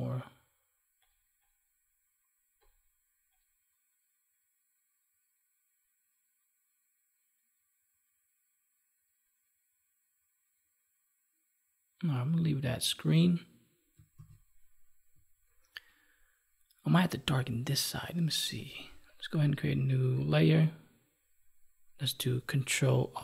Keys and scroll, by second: 14.0 ctrl+s.